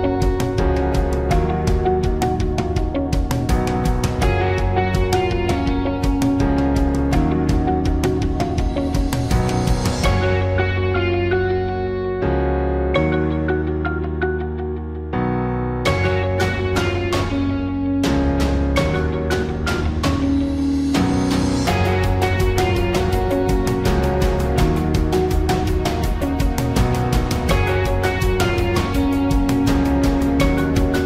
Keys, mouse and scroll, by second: 18.2-20.7 drag, 25.1 alt+Delete.